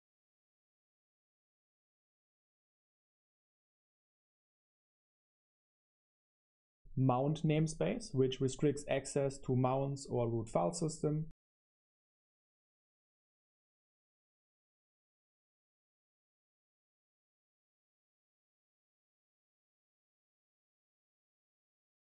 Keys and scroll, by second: 0.0-6.5 typing, 11.0 space, 11.7 super+7, 13.1-22.0 typing.